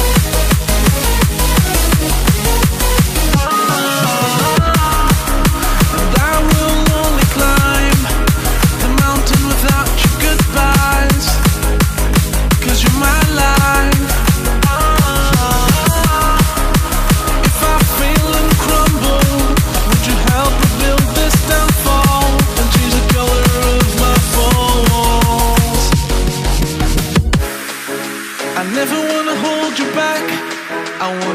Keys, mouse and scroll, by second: 0.2 c, 0.4 click, 0.6 v, 1.2 t, 1.8 click, 2.8 Return, 3.2 click, 7.7 click, 18.2 click, 29.2 click, 30.3-31.3 typing.